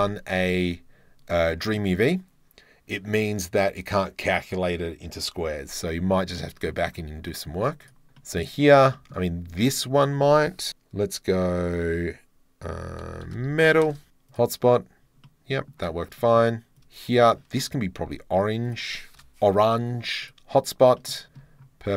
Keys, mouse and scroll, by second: 1.5 shift+middle click, 6.4 middle click, 6.7 scroll up 1, 7.5-8.2 scroll up 2, 8.2 drag, 9.0 shift+click, 15.3 click, 15.5 middle click, 16.2 middle click, 16.8 shift+middle click, 18.7 click, 19.2-20.2 middle drag, 20.2 click, 21.2 shift+middle drag.